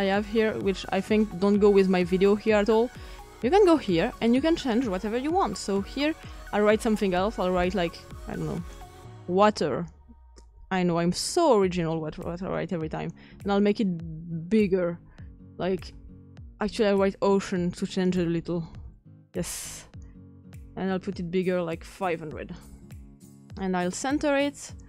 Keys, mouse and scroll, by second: 8.6-12.7 typing, 18.2-19.4 typing.